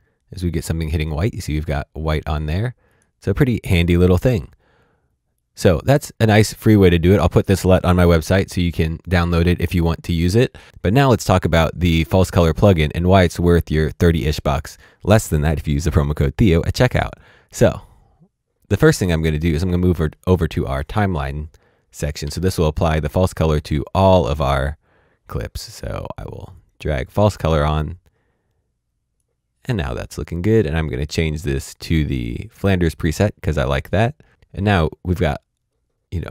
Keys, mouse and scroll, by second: 2.9 click, 4.3 right click, 5.3 click, 10.6 click, 11.5-14.1 scroll down 1, 16.6 click, 19.9 click, 22.2 alt+s, 26.5 click, 29.1 click.